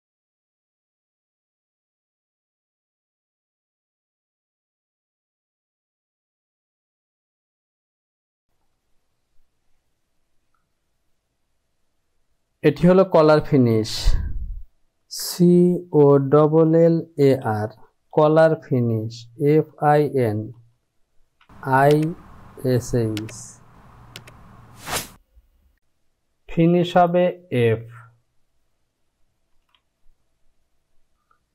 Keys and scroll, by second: 0.0-4.0 typing, 6.8 KP_2, 6.9 Return, 7.2 KP_1, 16.2-18.2 typing, 19.2-21.1 typing, 30.3 f.